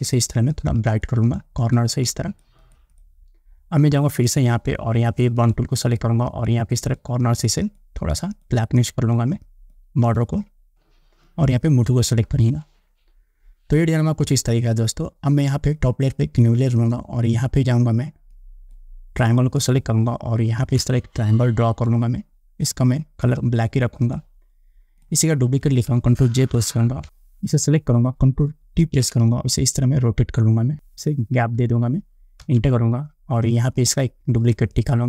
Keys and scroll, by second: 26.6 ctrl+j, 27.0 Return, 29.0 ctrl+t, 32.7 Return.